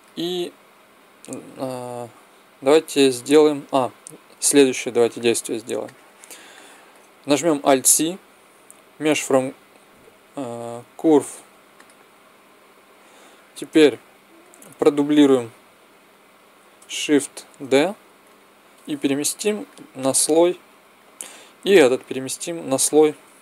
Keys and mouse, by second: 4.6 ctrl+z, 7.5 alt+c, 12.9-15.5 middle drag, 15.5 right click, 17.3 shift+d, 19.1 m, 21.5-23.4 drag.